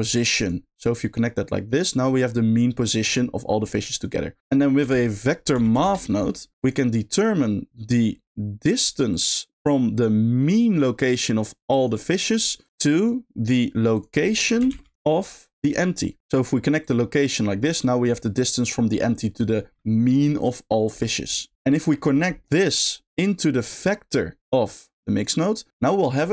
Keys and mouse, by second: 1.0-1.8 drag, 2.1 middle click, 4.4 shift+a, 7.1-9.2 drag, 9.9 click, 10.0-11.4 drag, 11.7 click, 12.6 click, 12.8 middle click, 13.9 click, 14.3 middle click, 14.7 shift+d, 15.5 middle click, 16.8 click, 22.4 middle click, 24.1 click, 24.2-25.2 drag, 26.2 middle click.